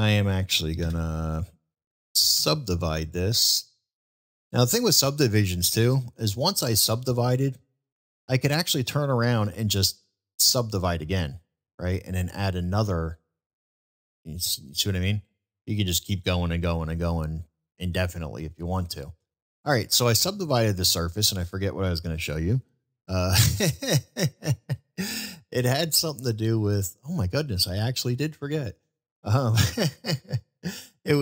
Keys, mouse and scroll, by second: 3.5 click, 7.0 middle click, 12.9-16.1 drag, 20.2 middle click, 22.6-22.9 shift+middle drag, 23.2 shift+middle drag, 24.0-24.4 shift+middle drag, 24.8-26.2 middle drag, 26.9 middle click.